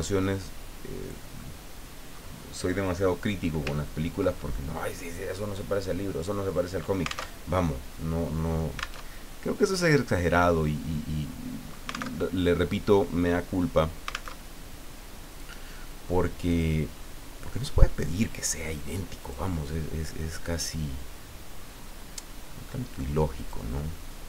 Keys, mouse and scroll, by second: 1.4 middle click, 3.8 ctrl+scroll up 2, 4.3 ctrl+middle click, 7.3 alt+Tab, 9.1 alt+Tab, 12.2 alt+Tab, 14.3 alt+Tab, 16.5 click, 19.2 click, 21.5-22.0 scroll down 2, 22.5 scroll up 2, 23.4 click.